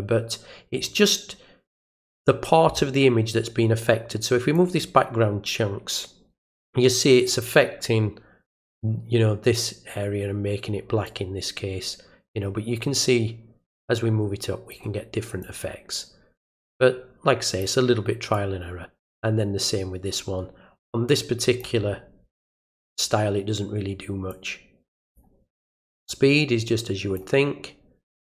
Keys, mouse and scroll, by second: 4.5-7.2 drag, 11.0-14.7 drag, 15.4-17.6 drag, 18.3-21.6 drag, 24.3 click, 26.1-27.1 drag.